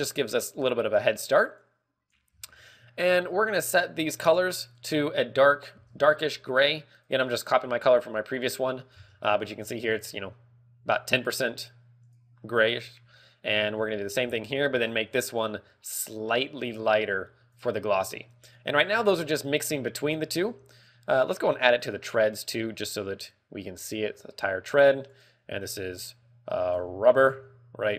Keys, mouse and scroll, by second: 0.6 middle click, 2.1 click, 2.9-3.2 scroll up 3, 3.2 middle click, 7.5 click, 9.5 ctrl+v, 9.8 click, 13.0 middle click, 14.8 ctrl+v, 15.4 click, 18.9 click, 19.3-20.0 scroll down 4, 19.7 middle click, 22.9 right click, 25.6 click.